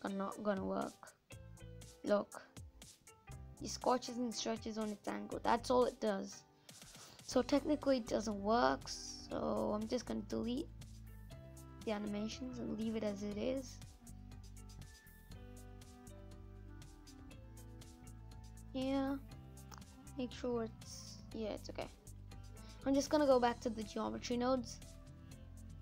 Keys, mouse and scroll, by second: 1.6-4.8 drag, 4.8-6.5 middle drag, 6.5-7.6 drag, 8.3 Delete, 8.8 click, 9.1 Delete, 9.7 click, 10.0 Delete, 11.0-12.6 drag, 12.6-13.1 scroll down 3, 13.1 middle click, 13.6 n, 18.4 middle click, 18.9-19.3 scroll up 3, 19.7 n, 22.4 click, 22.8 scroll up 2, 23.2 scroll down 2, 23.3-25.8 middle drag.